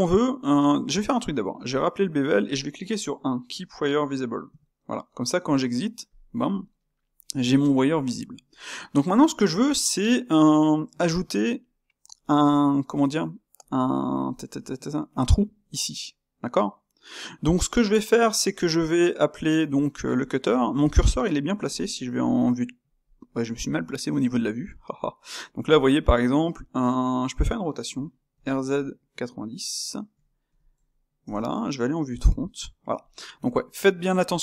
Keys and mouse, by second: 1.7 space, 8.0-22.1 ctrl+shift+middle drag, 22.1 KP_3, 22.8 KP_1, 23.9-28.3 ctrl+middle drag, 28.3 r, 32.1 KP_1.